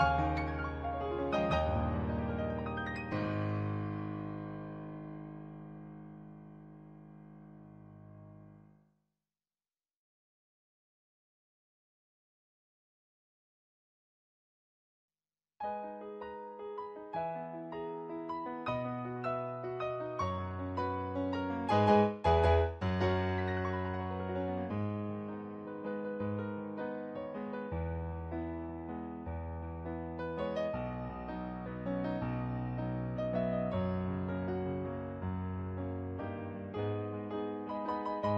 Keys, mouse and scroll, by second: 0.9 ctrl+z, 2.8 ctrl+z, 4.0 ctrl+z, 4.5 ctrl+z, 5.3 ctrl+z, 6.5 ctrl+z, 8.8 ctrl+z, 9.0 ctrl+z, 10.0 ctrl+z, 11.0 ctrl+z, 11.7 ctrl+z, 14.3 ctrl+z, 15.6 ctrl+z, 16.0 ctrl+z, 16.4 ctrl+z, 16.8 ctrl+z, 18.2 ctrl+z, 19.5 ctrl+z, 20.5 ctrl+z, 21.6 ctrl+z, 22.0 ctrl+z, 23.6 ctrl+z, 24.6 ctrl+z, 25.0 ctrl+z, 25.5 ctrl+z, 26.2 ctrl+z, 26.5 ctrl+z, 26.8 ctrl+z, 27.1 ctrl+z, 30.5 ctrl+z, 31.7 ctrl+z, 32.1 ctrl+z, 32.5 ctrl+z, 34.2 ctrl+z.